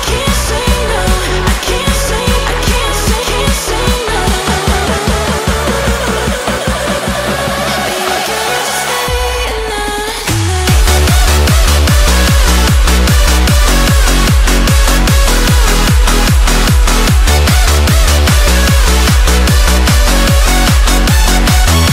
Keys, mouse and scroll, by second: 1.1 middle click, 1.5 KP_1, 2.0 shift+middle click, 2.6-2.9 scroll up 1, 2.9 g, 4.6-5.4 middle drag, 5.4 click, 5.8 d, 6.8 click, 7.4-7.7 scroll down 1, 7.7-9.2 shift+middle drag, 9.2 s, 11.8 KP_1, 12.3-13.0 shift+middle drag, 13.0 click, 13.4 shift+click, 13.7 shift+click, 14.5 g, 16.0 shift+d, 16.4 s, 19.3-19.7 scroll down 1, 19.7-20.0 shift+middle drag, 20.0-20.4 scroll up 1, 20.4 r.